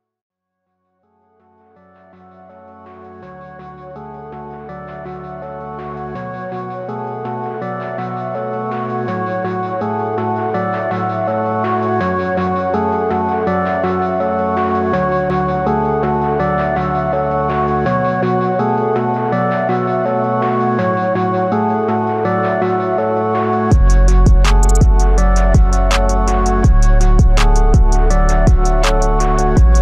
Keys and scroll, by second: 6.6 ctrl+z, 14.1 Return, 16.8 ctrl+t, 23.2 Return.